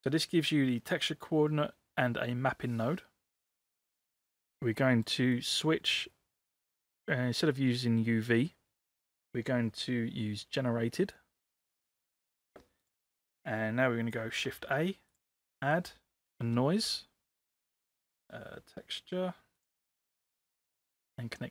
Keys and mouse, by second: 4.9 middle click, 5.6 middle click, 11.1-11.8 drag, 14.5 shift+a.